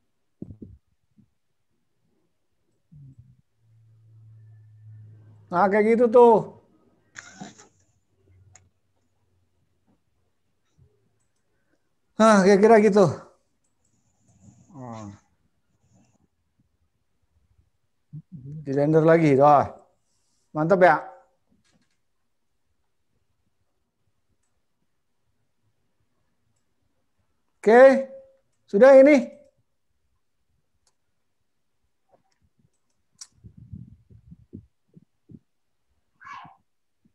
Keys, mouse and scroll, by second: 1.4 click, 3.4 click, 7.6 click, 11.4 click, 29.5 click.